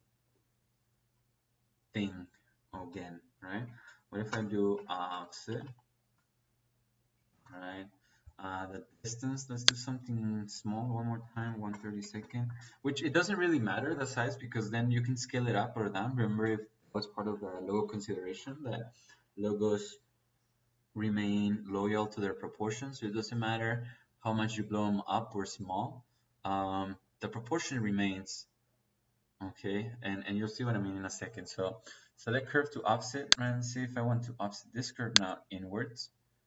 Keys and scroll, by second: 3.4 Escape, 4.6 o, 5.0 BackSpace, 5.4 f, 7.2 Return, 11.3 KP_1, 11.6 KP_Divide, 11.9 KP_3, 12.2 KP_2, 12.4 Return.